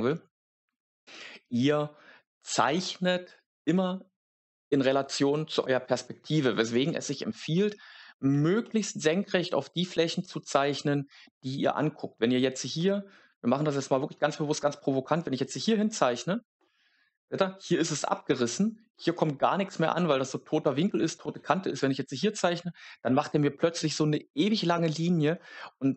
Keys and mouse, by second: 10.6 click, 15.4 click, 21.6 click.